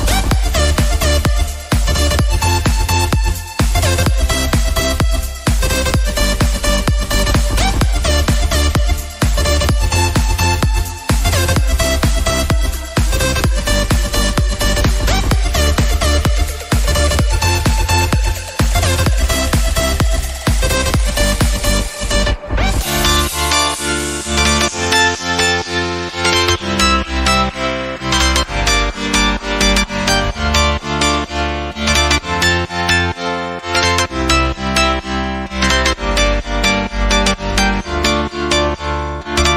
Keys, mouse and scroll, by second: 0.5-1.3 scroll down 5, 1.5-2.1 scroll up 4, 2.8-3.8 scroll down 6, 3.8 alt+z, 4.7 click, 4.8 scroll down 1, 5.1-5.6 shift+middle drag, 5.6-6.0 scroll up 1, 6.0 scroll down 2, 6.1-6.9 middle drag, 6.9-7.5 scroll up 8, 7.7-8.8 shift+middle drag, 8.8-9.2 scroll down 1, 9.2 click, 9.3-9.8 middle drag, 9.8 scroll down 2, 9.9-10.3 shift+middle drag, 10.3-11.1 scroll up 1, 11.1 click, 11.5 scroll down 1, 11.6 middle click, 12.1 drag, 12.6 shift+drag, 13.0 shift+drag, 13.3 shift+click, 13.6 shift+drag, 13.9-14.6 shift+middle drag, 14.6 shift+drag, 15.1 shift+drag, 15.4 shift+drag, 15.6 shift+middle click, 15.9 scroll up 2, 16.1-16.5 middle drag, 16.5 shift+drag, 16.8 shift+click, 17.1 shift+click, 17.4 shift+click, 17.8 middle drag, 18.0 scroll up 1, 18.2-18.8 shift+middle drag, 18.8 s, 20.3-20.8 middle drag, 20.8 click, 21.1-21.5 scroll down 6, 21.5-22.9 middle drag, 22.9 KP_1, 23.1-23.5 scroll up 1, 23.6 click, 24.4 click, 24.7 click, 25.2 click, 26.1 click, 26.9 click, 28.0 drag, 28.9 shift+middle click, 29.1 scroll up 3, 29.4 shift+drag, 29.8 shift+drag, 30.0 shift+drag, 30.3 shift+click, 30.5-31.3 scroll down 4, 30.6-30.9 shift+middle drag, 31.3 g, 32.2 ctrl+j, 32.8 click, 33.6 click, 34.3 click, 35.1 click, 35.6 click, 36.7 click, 37.5 drag, 37.8-38.2 scroll up 1, 38.2 click, 38.9 click, 39.3 drag.